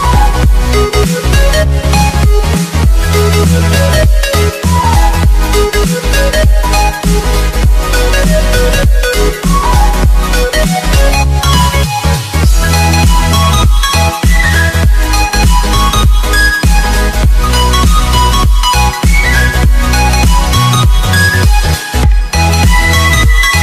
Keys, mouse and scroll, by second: 1.2 click, 12.2 ctrl+t, 13.5 click, 18.4 Return, 19.6 ctrl+s, 20.9 click.